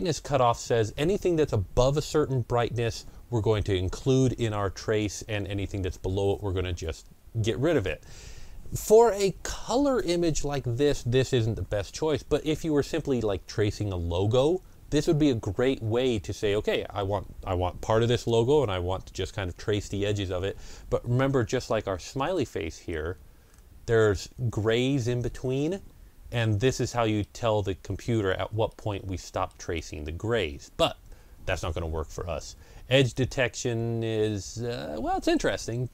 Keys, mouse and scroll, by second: 22.2-25.7 middle drag, 22.2 click, 23.3 ctrl+scroll up 1, 23.8 ctrl+scroll up 1, 25.7 ctrl+scroll down 1, 26.5-28.5 middle drag, 27.3 ctrl+scroll down 1, 27.9 ctrl+scroll down 1, 28.5-31.0 middle drag, 29.6 ctrl+scroll up 1, 30.3 ctrl+scroll down 1, 31.0 ctrl+scroll up 1, 33.0 click.